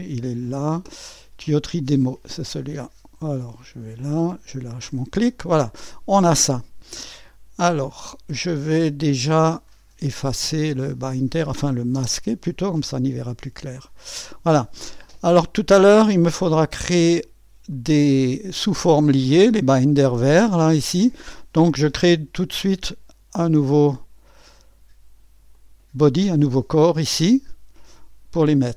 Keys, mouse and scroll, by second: 1.7-4.5 drag, 7.1-8.7 drag, 10.7 click, 11.9 space, 13.0-14.4 drag, 16.4 click, 23.8 click, 25.5 click.